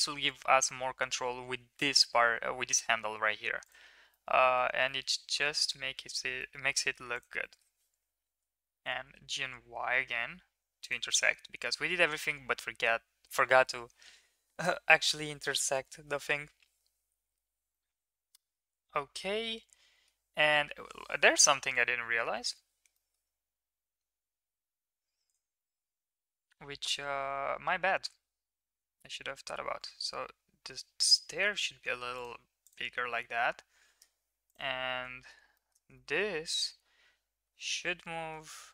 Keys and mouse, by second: 4.1 middle click, 4.8 middle click, 6.3 middle click, 7.1 click, 7.3 middle click, 8.6 g, 11.2-12.2 middle drag, 17.6-20.1 middle drag, 22.3 Tab, 22.9 shift+middle drag, 25.2 click, 25.5 middle click, 26.4 KP_1, 29.1 s, 32.6 click, 34.4 shift+click, 35.5 shift+middle click, 35.9 middle drag, 37.3 g.